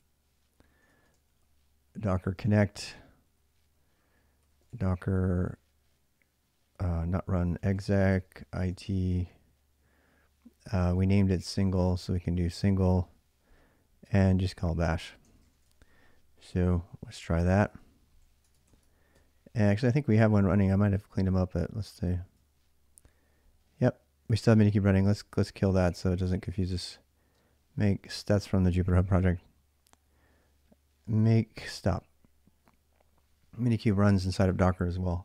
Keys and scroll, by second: 0.0-4.5 typing, 7.1-9.0 typing, 10.8-12.0 typing, 13.7-15.9 typing, 15.1 ctrl+[, 17.3 ctrl+a, 17.5 ctrl+a, 18.1 ctrl+a, 18.4 ctrl+a, 18.9 c, 21.5-22.5 typing, 24.5-25.3 typing, 27.1-28.1 typing, 31.4 Return, 31.4 typing.